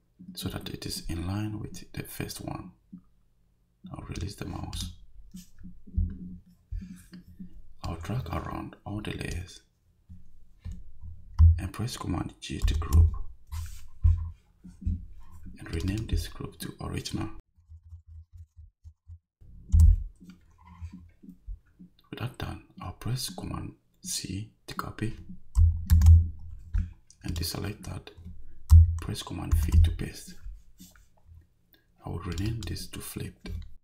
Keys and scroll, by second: 12.6 super+g, 17.4-19.0 typing, 19.7 Return, 25.9 super+c, 29.5 super+v.